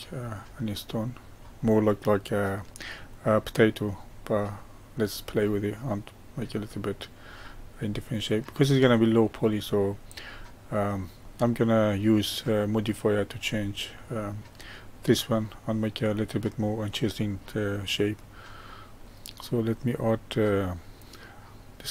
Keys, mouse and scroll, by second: 1.5-7.9 middle drag, 7.9-8.5 scroll down 1, 8.5-10.5 middle drag, 10.5-11.2 scroll up 1, 11.2-18.6 middle drag, 18.6-21.7 drag.